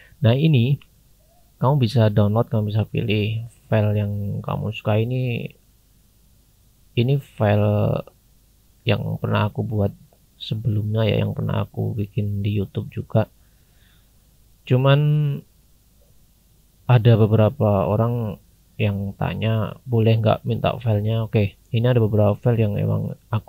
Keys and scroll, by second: 1.0 scroll down 1, 9.4-10.9 scroll down 1, 10.9-11.8 scroll up 1.